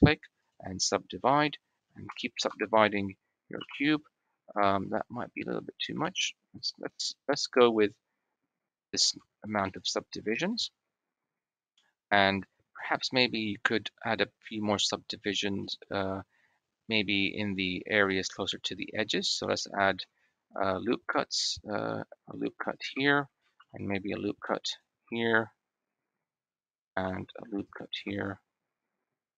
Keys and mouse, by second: 2.0 shift+r, 2.3 shift+r, 3.4 shift+r, 5.8 ctrl+z, 6.7 click, 8.6 Tab, 9.0 Tab, 9.5 click, 13.3 shift+click, 13.7 shift+middle click, 15.5 shift+middle click, 17.9 middle click, 19.6 ctrl+r, 22.9 shift+click, 23.4 ctrl+r, 26.8 ctrl+r.